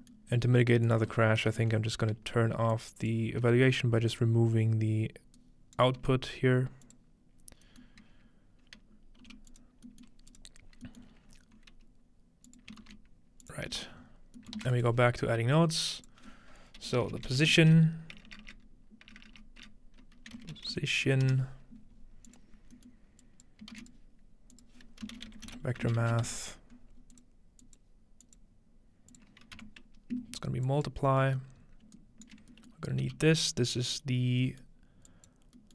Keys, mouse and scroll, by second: 0.0-0.3 middle drag, 0.9 click, 1.5 ctrl+x, 1.5-5.8 drag, 1.5-2.2 scroll up 1, 3.4 g, 5.4-7.8 right drag, 6.1 g, 6.8-8.6 drag, 7.6-9.2 scroll up 2, 7.8-8.1 middle drag, 9.2 g, 9.5-13.7 drag, 9.8-10.9 scroll down 3, 12.8-14.6 typing, 13.7-14.0 scroll down 1, 14.0 scroll up 1, 14.8-17.9 shift+drag, 17.0-21.7 typing, 22.3-26.9 drag, 22.9-24.4 middle drag, 23.7 shift+a, 25.0 typing, 27.1-29.8 drag, 29.6 m, 30.7 click, 31.1-31.6 scroll down 1, 31.6-32.0 scroll up 1, 32.0 shift+middle click, 33.1 g, 33.6 click, 33.7 right click, 34.3-35.5 scroll up 1, 35.5-35.7 scroll down 1.